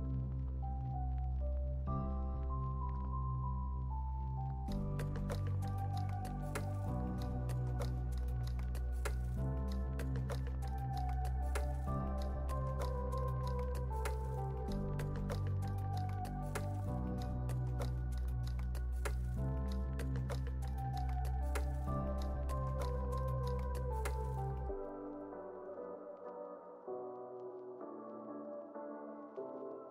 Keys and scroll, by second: 8.4 x, 9.6 x, 16.1 z, 17.7 x, 18.3 z, 22.6 super+=, 23.7 space, 25.9 super+z.